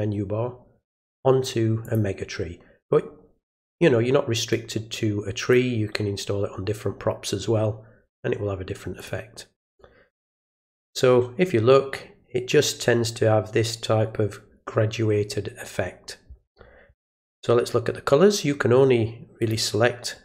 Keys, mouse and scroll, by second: 1.8 click, 4.5-5.5 drag, 8.9 click, 19.4 click.